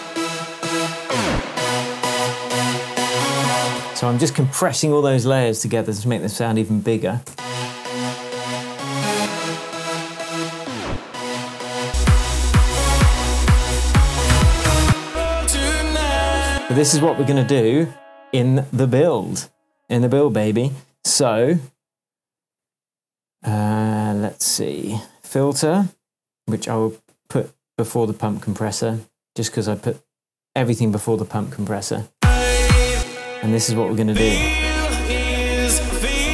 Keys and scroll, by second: 3.7 space, 7.3 space, 14.8 space, 16.5 space, 32.1 space.